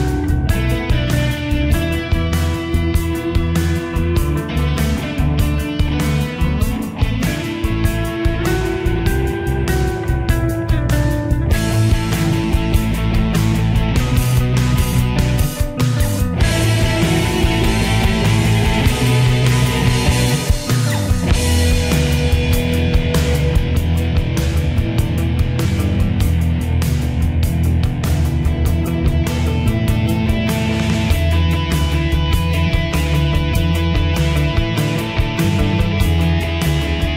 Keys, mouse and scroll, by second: 11.9 click, 12.1-19.8 drag, 19.8 right click, 21.1-32.8 drag, 34.1 l, 35.9 click.